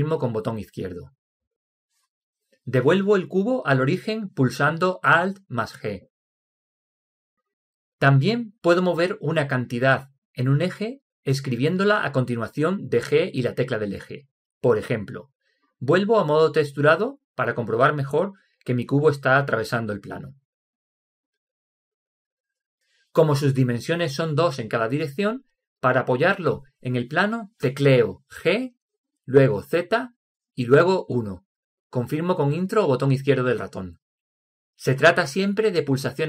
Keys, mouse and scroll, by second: 6.7 alt+g, 17.4-19.4 drag, 29.2 g.